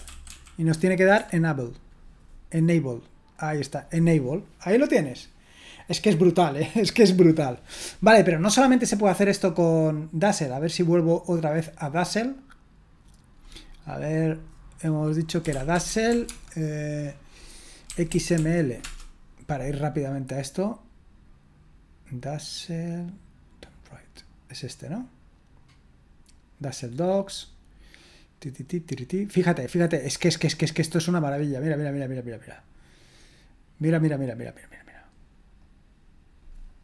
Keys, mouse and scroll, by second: 0.0-0.8 typing, 1.1 Return, 3.3-9.8 drag, 10.4-14.6 drag, 15.1-16.6 typing, 17.8-18.8 typing, 23.7 click, 31.5-34.4 drag, 35.1-36.8 drag.